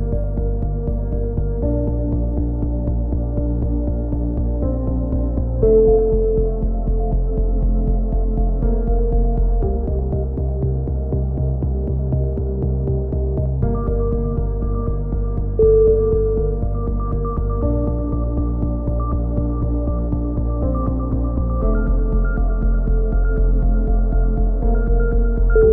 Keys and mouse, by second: 0.2 z, 0.4 z, 0.6 click, 1.5 z, 1.7-3.5 drag, 3.5 right click, 3.8 x, 4.2 x, 4.5 z, 4.6 click, 8.1 right click, 8.3 click, 9.0 right click, 9.3 click, 10.0 e, 10.2 ctrl+z, 10.6 click, 11.3 e, 12.1 click, 12.3 a, 12.5 click, 12.5 z, 13.3 z, 13.4 click, 14.3 right click, 14.8 middle click, 14.8 f, 14.8 a, 14.9 z, 15.2 click, 16.0 KP_3, 16.2 z, 16.7 click, 19.0 click, 19.8 right click, 20.1-22.2 drag, 21.7-24.8 typing, 22.6 right click, 23.4 ctrl+z, 23.8 click, 24.9-25.7 drag.